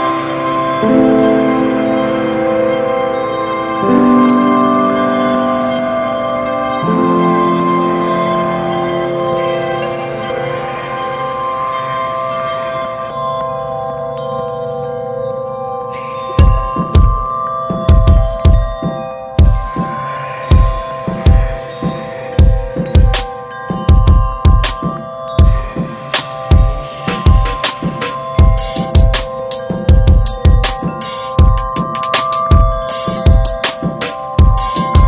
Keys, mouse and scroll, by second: 3.1 middle click, 3.3 e, 3.7 alt+s, 8.0 middle click, 8.1 scroll up 2, 8.4 Tab, 8.7 middle click, 9.2 Tab, 10.4 2, 11.0 click, 11.6 alt+shift+click, 12.1 middle click, 13.0 alt+shift+click, 13.4 middle click, 14.0 alt+shift+click, 14.4-15.5 middle drag, 15.5 alt+shift+click, 15.9 middle click, 16.4 ctrl+b, 17.7 Tab, 17.8 click, 18.1 ctrl+a, 18.8 click, 19.0-19.7 scroll down 11, 19.7 alt+middle click, 20.0-21.0 scroll up 5, 20.3 shift+middle click, 20.6 Tab, 21.2 alt+z, 21.5-22.6 shift+middle drag, 22.6 ctrl+r, 23.8 s, 25.1 alt+z, 25.7 alt+z, 26.1 scroll down 1, 26.3 Tab, 26.4 click, 27.3 Tab, 28.0 click, 28.9 shift+middle click, 29.6 click, 31.3 alt+z, 31.5 click, 32.5 1, 32.9 click, 33.2 alt+z, 34.0 click.